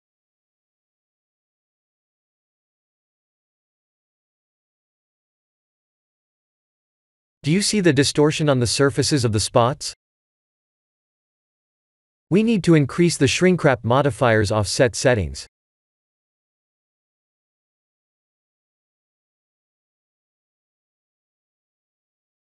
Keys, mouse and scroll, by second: 1.7 click, 2.3 ctrl+s, 21.8 click.